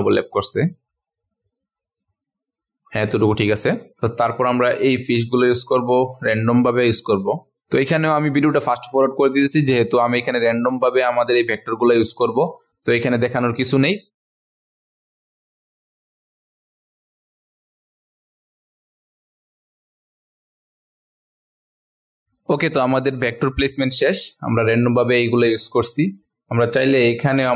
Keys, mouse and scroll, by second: 0.8 shift+click, 1.7-2.8 drag, 4.2-5.5 ctrl+alt+scroll up 1, 5.5-14.4 drag, 14.5 ctrl+alt+scroll down 1, 14.7 click, 14.9 alt+click, 15.0 alt+click, 15.2 alt+click, 15.4 alt+click, 15.6 alt+click, 15.8 click, 16.2 click, 16.5 click, 16.7 alt+click, 16.9 alt+click, 17.7 click, 17.9 alt+click, 18.1 click, 18.7 alt+click, 18.9 alt+click, 19.2 click, 20.0 click, 20.3 alt+click, 20.5 alt+click, 20.8 alt+click, 22.0 click, 22.2 click, 23.7 ctrl+alt+scroll down 1, 25.4 click, 26.1-26.4 ctrl+alt+scroll down 1, 27.4 click.